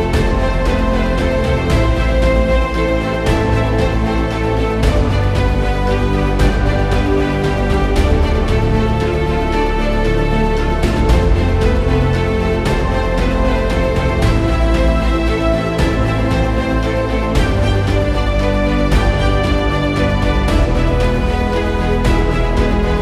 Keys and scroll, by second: 0.0-7.8 typing, 9.5-23.0 typing.